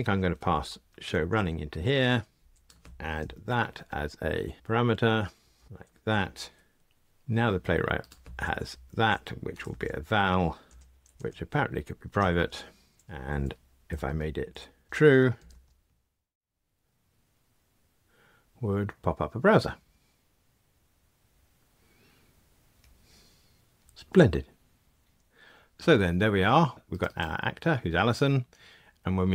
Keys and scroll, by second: 1.4 Return, 3.2 alt+Return, 11.1 alt+Return, 13.0 alt+super+n, 23.9 super+z.